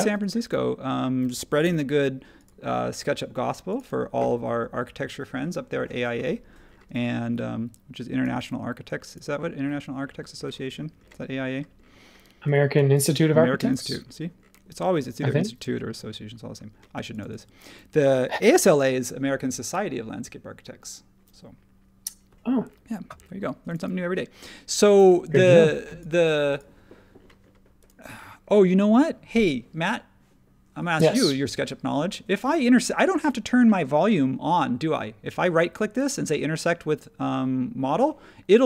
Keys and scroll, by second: 0.0 e, 1.6 r, 3.9 space, 7.2 e, 15.6 space.